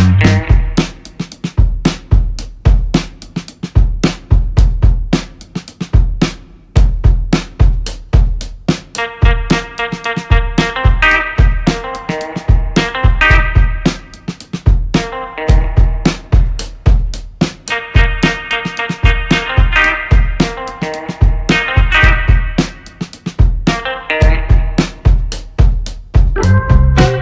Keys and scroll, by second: 0.1 Return, 2.5 shift+a, 6.0 3, 6.2 2, 6.6 Return, 16.0 2, 16.2 4, 16.5 Return, 24.3 0, 24.7 Return.